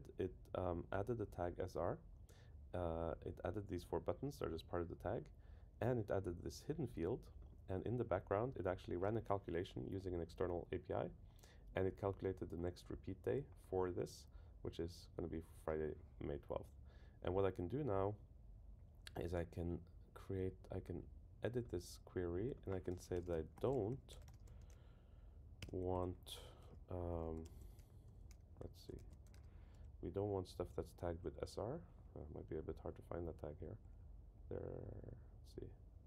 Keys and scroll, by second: 23.5 Down, 24.3 Down, 25.6 Return, 25.9 Right, 31.6 Down.